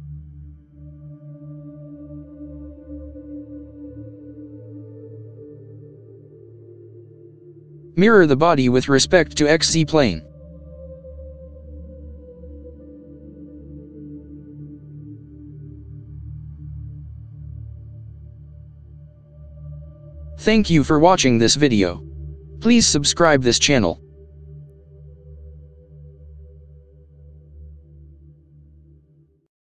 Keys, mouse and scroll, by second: 0.9 KP_1, 3.8 middle click, 4.4-5.5 middle drag, 12.4 middle click, 15.1 middle click, 20.2 click, 20.7-21.1 scroll up 2, 21.1-21.6 scroll down 2, 21.6 middle click, 22.4-22.8 scroll up 2, 22.8 middle click.